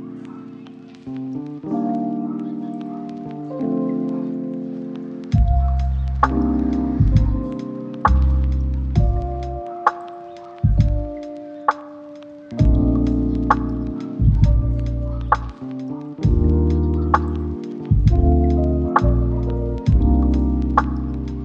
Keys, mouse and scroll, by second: 2.6 right click, 3.0-3.4 scroll up 1, 3.4 click, 9.3 scroll down 1, 9.5 scroll up 1, 9.6 right click, 10.0 click, 10.1 right click, 10.5-12.7 drag.